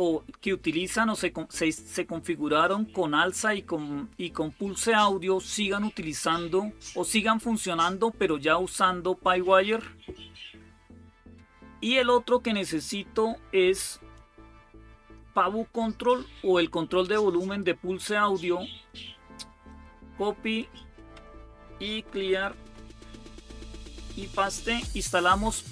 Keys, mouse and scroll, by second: 14.1-15.9 drag, 17.3 right click, 19.5 click, 20.5 click, 21.5-22.6 typing, 23.7 ctrl+v.